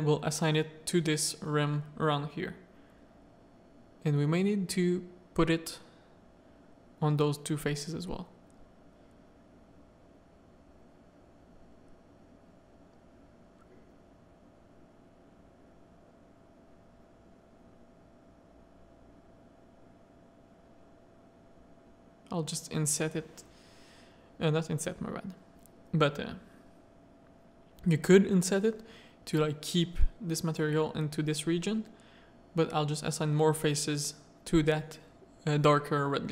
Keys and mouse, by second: 0.0 Tab, 0.5 middle click, 1.3 Tab, 1.3 middle click, 2.3 z, 2.5 click, 3.0 z, 3.7 3, 4.0 click, 4.8 click, 5.9 ctrl+click, 6.4 z, 8.1 click, 9.1 Tab, 9.7 alt+a, 10.0 click, 10.1 middle click, 10.4 z, 14.1 z, 14.6 Tab, 14.8 middle click, 15.2 z, 16.8 z, 17.1 z, 18.1 ctrl+click, 19.7 shift+click, 21.4 click, 21.9 click, 22.2 z, 23.4 z, 23.6 a, 25.2 z, 25.9 z, 27.5 z, 28.8 shift+click, 32.0 click, 32.4 Tab, 32.8 middle click, 33.1-33.5 drag, 33.7 z, 35.1-35.8 middle drag.